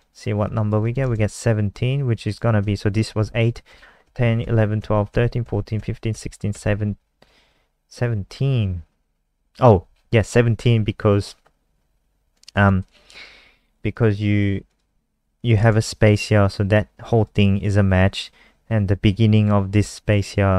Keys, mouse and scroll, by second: 0.8 click, 2.2 click, 3.6 Right, 4.0 Right, 4.4 Right, 4.7 Right, 5.1 Right, 5.4 Right, 5.7 Right, 6.1 Right, 6.5 Right, 12.3 click, 12.8 click, 13.6 click, 15.8 click, 16.4 click, 20.0 shift+click.